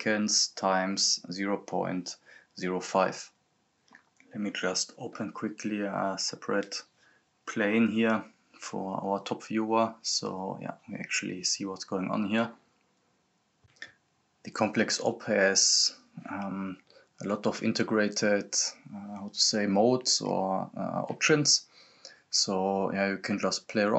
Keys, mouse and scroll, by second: 1.1 ctrl+c, 1.6 click, 2.5 ctrl+v, 3.2 click, 4.0-4.7 scroll down 1, 5.4 click, 5.9 right click, 6.2-7.2 typing, 7.2 click, 12.5 click, 13.1 scroll up 1, 13.3 click, 17.1 click.